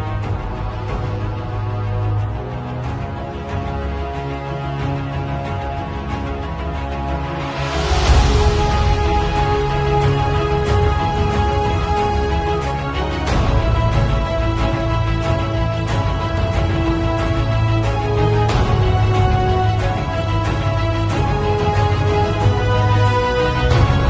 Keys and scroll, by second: 8.5 super+i, 10.2-11.8 typing, 12.9 b, 18.9-21.0 typing, 22.3-24.0 typing.